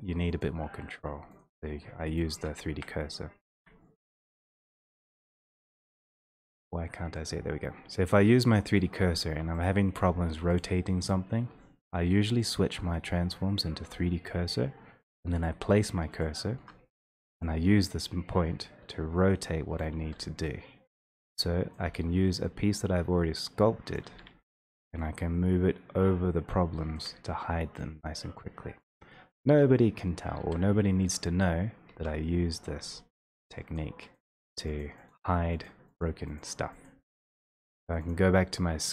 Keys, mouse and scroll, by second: 0.5 click, 2.2 alt+middle click, 7.3 click, 8.2 alt+middle click, 9.7 alt+middle click, 10.6 alt+click, 12.5 click, 15.5 alt+middle click, 19.8 click, 20.0 w, 21.7 click, 21.8 e, 23.9 click, 28.8 click, 30.4 shift+3, 31.4 click, 31.9-32.9 typing, 33.8 click, 34.3 click, 34.5 click, 34.8 click, 35.1 click, 35.8 click, 36.0 click, 36.4 click, 36.9 click, 37.2 click, 38.1 click.